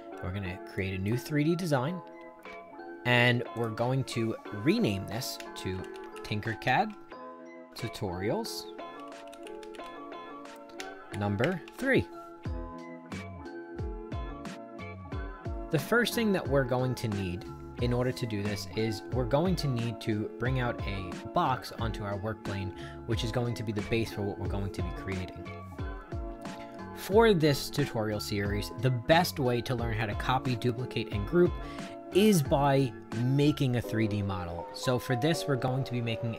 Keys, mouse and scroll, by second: 0.7 click, 3.5 click, 5.3-11.6 typing, 12.8 click.